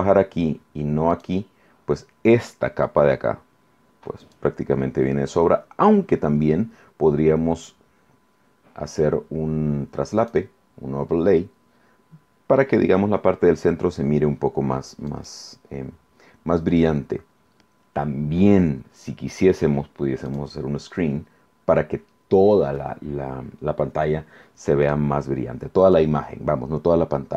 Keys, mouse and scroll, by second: 1.1 click, 4.2 click, 10.2 click, 15.1 click, 20.3 click, 25.8 click.